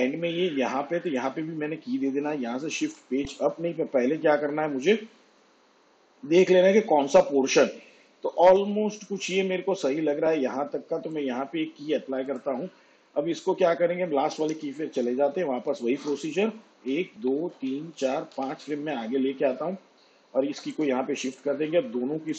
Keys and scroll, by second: 2.8 shift+Page_Up, 14.5 k, 15.6 shift+Page_Up, 16.8 ctrl+Left.